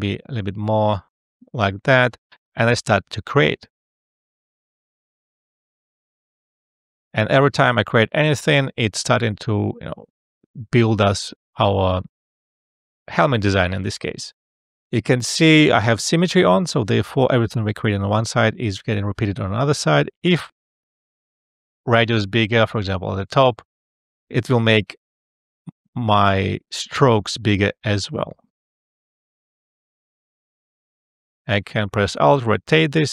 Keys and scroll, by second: 20.6 ], 23.2 1, 23.5 Return.